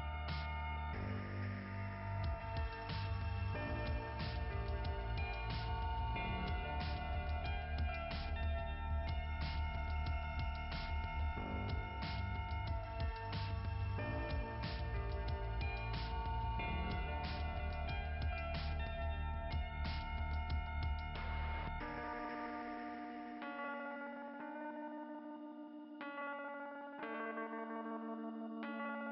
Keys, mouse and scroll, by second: 0.8 click, 0.9 click, 2.5 scroll down 2, 5.9 click, 6.4 click, 6.5 click, 8.9 click, 16.9 click, 17.3 click, 18.3 click, 19.6-20.2 scroll up 2, 22.9 scroll down 2, 26.3 click, 28.5 click.